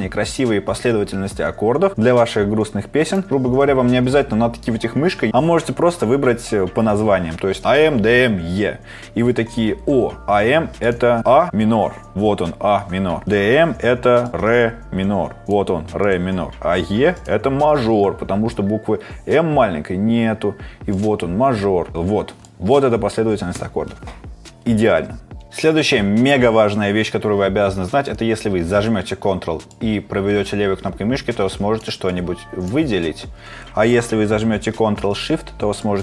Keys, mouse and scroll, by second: 29.7 click, 35.8 click.